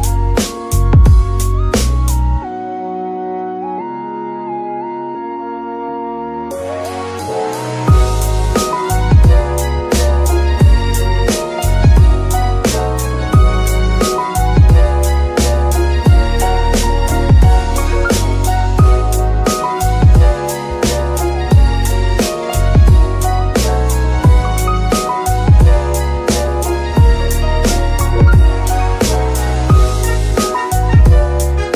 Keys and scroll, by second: 7.4 ctrl+Tab, 11.5 shift+z, 28.1 ctrl+Tab.